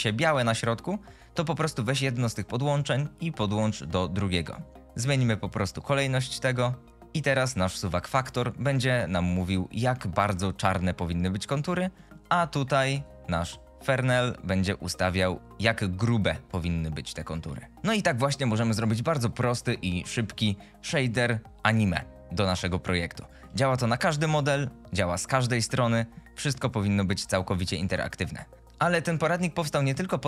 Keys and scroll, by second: 21.3 g.